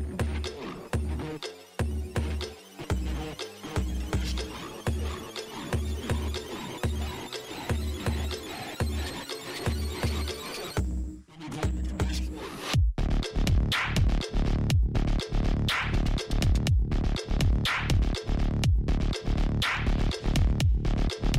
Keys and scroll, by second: 1.7 alt+space, 1.9 alt+i, 17.8 alt+i, 18.2 alt+space.